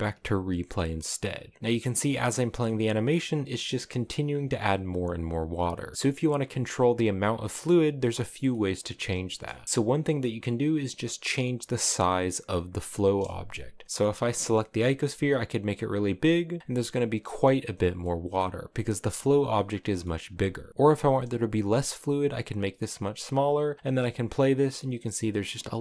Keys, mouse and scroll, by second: 0.2-1.6 drag, 1.6-4.6 middle drag, 4.6-5.5 scroll down 1, 5.5-5.9 scroll up 1, 5.9-8.8 middle drag, 8.8 space, 12.6-14.4 right drag, 14.4 s, 16.4 click, 16.6 middle click, 17.5-17.9 scroll down 2, 17.9-20.2 middle drag, 20.2 space, 20.6 click, 20.7 s, 23.0 click, 23.7 space, 24.7-25.8 middle drag.